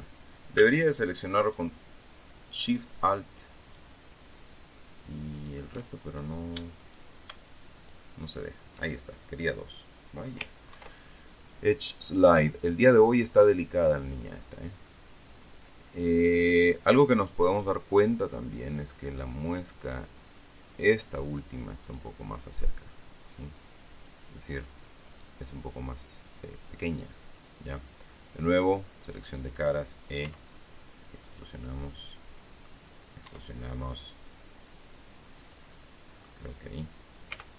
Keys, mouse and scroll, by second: 2.0 alt+shift+right click, 4.2 alt+shift+right click, 5.9 alt+shift+middle click, 6.6 alt+shift+middle click, 6.9 alt+shift+right click, 8.3 alt+shift+middle click, 11.3 ctrl+e, 12.0 click, 14.3 click, 18.1 click, 19.5 right click, 20.4-21.8 drag, 22.4 middle click, 23.4-24.8 drag, 26.3-28.6 drag, 28.7 click, 29.6 click, 30.8 e, 31.9 click, 32.2-33.4 middle drag, 33.8 e, 35.9 click, 36.3 middle click.